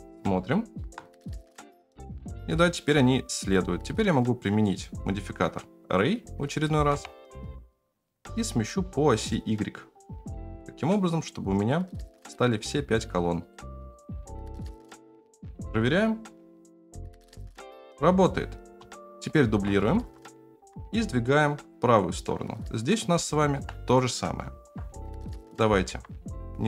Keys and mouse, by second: 0.5 shift+middle click, 2.5 space, 4.0-5.4 drag, 6.5-7.9 drag, 8.8-10.9 drag, 11.6 click, 13.4 click, 13.9 right click, 14.5 shift+right click, 14.9 ctrl+z, 15.3 shift+right click, 15.4 space, 18.6 space, 18.9 middle drag, 19.5 shift+d, 23.1-23.5 shift+middle drag, 25.1 shift+middle drag, 25.6 g.